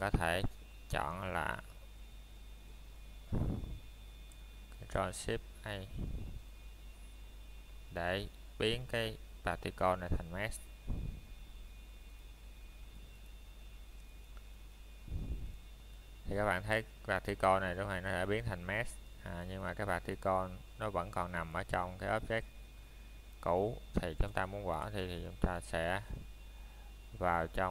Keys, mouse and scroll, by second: 1.9 click, 2.7 right click, 3.1 scroll up 1, 3.6 click, 9.3 right click, 10.5 middle click, 11.1-11.8 scroll up 1, 11.8 click, 12.1 scroll down 1, 12.6 middle click, 14.8 shift+middle click, 18.5 click, 23.8 middle click, 24.1-24.7 scroll up 1, 24.7 click, 26.9 right click, 27.5 scroll down 1.